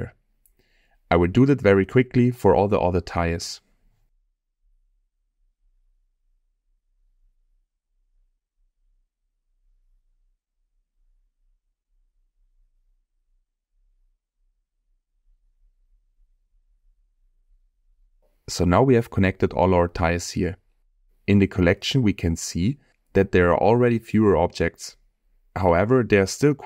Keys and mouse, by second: 0.9 middle click, 2.5 middle click, 2.7 middle click, 2.9 shift+middle click, 3.2 shift+click, 4.3 ctrl+middle click, 4.8 g, 5.5 middle click, 5.8 ctrl+p, 6.0 middle click, 6.3 shift+click, 6.6 middle click, 6.8 shift+drag, 7.0 g, 7.3 ctrl+p, 7.5 shift+middle click, 7.7 shift+middle click, 8.1 shift+click, 8.5 ctrl+middle click, 9.6 g, 10.0 g, 10.1 ctrl+middle click, 10.5 middle click, 10.8 g, 10.9 ctrl+p, 11.2 shift+middle click, 11.7 middle click, 12.0 shift+middle click, 12.1 middle click, 12.8 ctrl+g, 12.8 ctrl+p, 13.1 middle click, 13.3 shift+middle click, 13.6 shift+click, 13.8 ctrl+middle click, 14.4 shift+middle click, 15.3 g, 15.8 shift+click, 15.9 g, 16.3 ctrl+p, 17.4 middle click, 17.9 g, 18.1 ctrl+p, 18.4-19.5 drag, 21.4 click, 25.9 click.